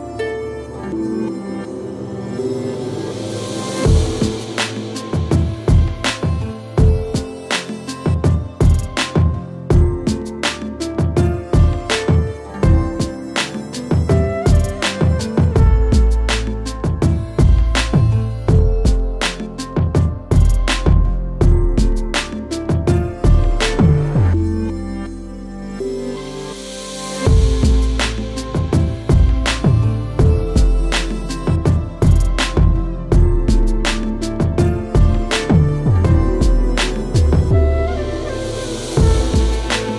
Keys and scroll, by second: 5.5 shift+Return, 8.6 shift+Return, 12.3 ctrl+j, 15.5 ctrl+shift+g, 18.3 ctrl+z, 20.2 ctrl+g, 24.9-29.4 typing, 29.9 Return, 31.6 ctrl+g, 33.5-36.7 typing, 36.8 Return, 39.0 Right, 39.1 space, 39.4 KP_1.